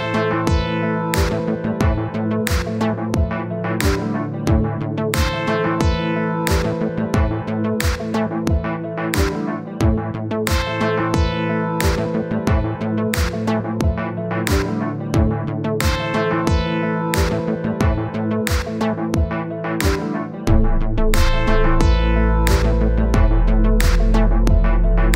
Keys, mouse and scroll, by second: 0.6 middle click, 1.1 click, 2.0 click, 2.8 middle click, 3.2-5.7 drag, 5.7 middle click, 6.1-7.2 drag, 7.2 middle click, 7.8-9.9 drag, 9.9-11.0 middle drag, 11.0-14.0 drag, 14.0 middle click, 14.4-15.6 drag, 15.6 middle click, 16.0 click, 16.5 middle click, 17.0-18.2 drag, 18.2 middle click, 18.7-21.9 drag, 21.9 scroll down 1, 22.1 middle click, 22.4-22.7 scroll up 1, 22.7-25.1 middle drag.